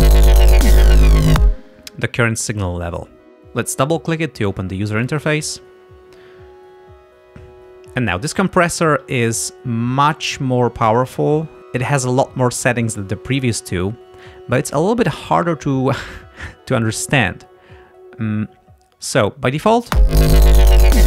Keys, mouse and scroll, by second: 1.5 space, 5.2 click, 8.0 click, 19.9 space.